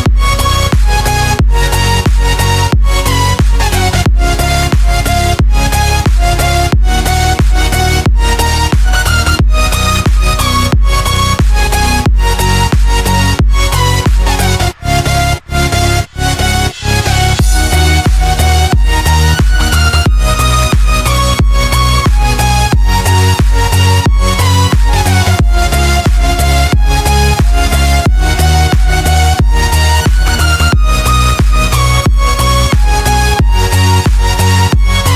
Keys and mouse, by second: 0.4 click, 1.6 click, 2.8 click, 7.8 click, 8.8 click, 11.0-13.8 shift+drag, 14.5-16.2 middle drag, 18.7 click, 19.6 Tab, 20.2-23.1 middle drag, 27.5-34.8 middle drag.